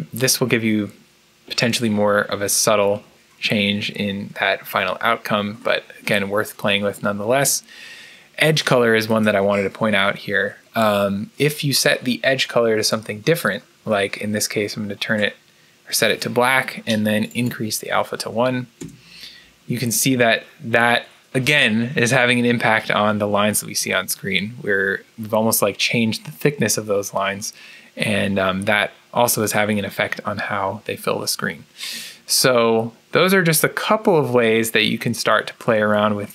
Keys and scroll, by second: 18.7 Return.